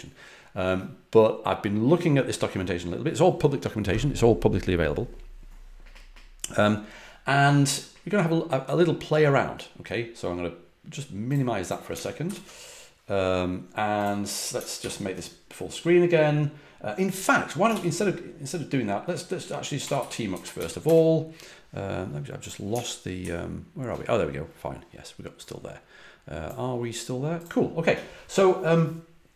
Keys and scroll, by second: 12.2 alt+super+f, 14.7 alt+super+f, 17.7 ctrl+d, 19.5-21.0 typing, 23.2 alt+super+Left.